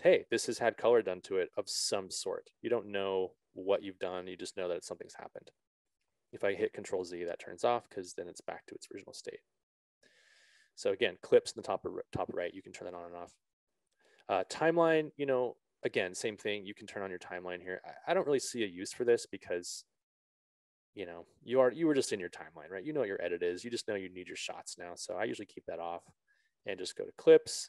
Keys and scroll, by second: 7.5 ctrl+z.